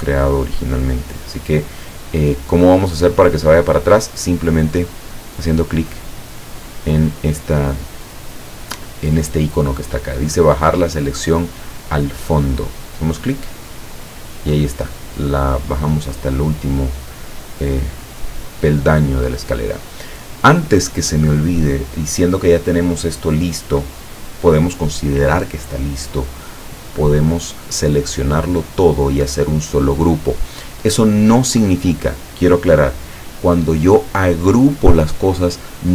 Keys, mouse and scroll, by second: 13.7 click, 17.3-19.0 drag, 26.9-28.5 drag.